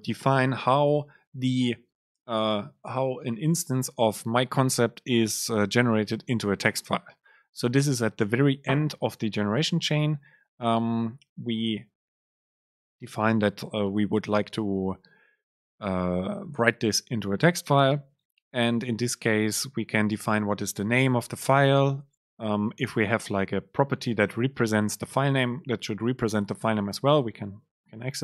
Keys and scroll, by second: 18.8 Up, 19.1 Down, 19.3 Up, 19.6 Down.